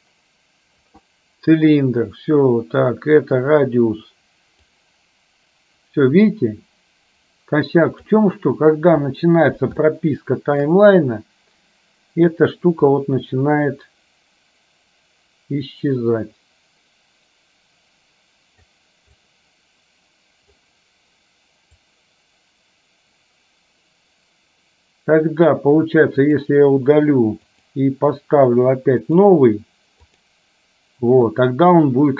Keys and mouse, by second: 4.8-8.2 drag, 9.9 shift+middle click, 12.9-18.8 drag, 19.4-20.7 drag, 22.2-25.6 drag, 26.3 click, 27.6 click, 29.2-30.4 drag.